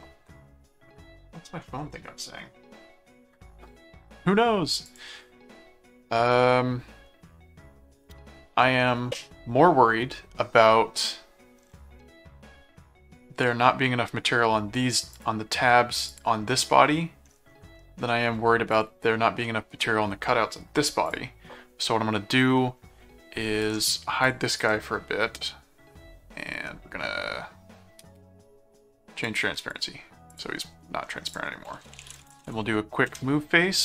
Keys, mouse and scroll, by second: 4.9 click, 5.4 middle click, 7.1 middle click, 12.0-13.7 middle drag, 15.1 click, 16.1 click, 17.7 middle click, 18.7 click, 19.4 middle click, 21.1 click, 23.6 right click, 24.2 click, 24.6 right click, 29.2 click, 30.3 click, 31.3 click, 31.5-32.9 typing, 33.1 Return.